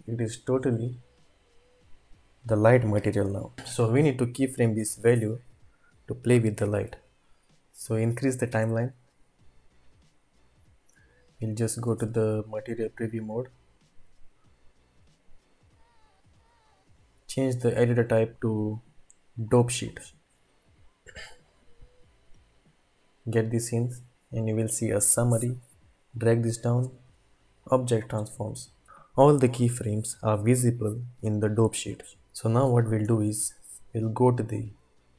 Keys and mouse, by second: 1.0-2.5 middle drag, 7.0 ctrl+s, 7.0-8.8 drag, 7.2 typing, 16.7-19.6 drag, 16.7 typing, 22.8 click, 26.1 click, 27.6 click.